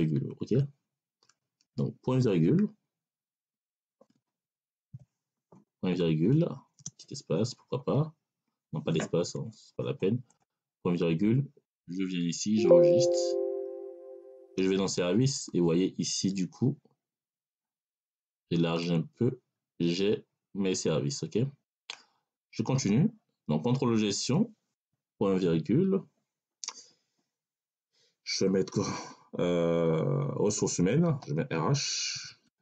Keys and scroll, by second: 2.3 ., 3.5 BackSpace, 4.8 ., 6.6 space, 9.1 BackSpace, 25.3 ., 31.1 r, 32.0 BackSpace, 32.5 r.